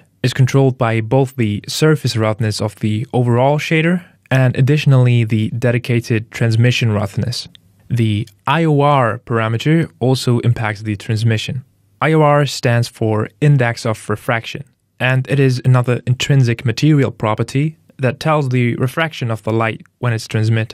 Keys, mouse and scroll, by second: 0.3 click, 3.4 click, 8.3 click, 15.0 shift+click.